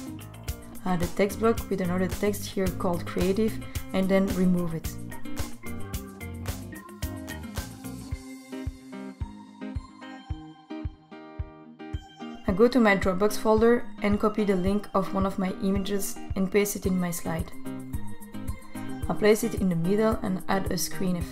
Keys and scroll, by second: 0.5 t, 9.6 BackSpace, 16.6 super+v.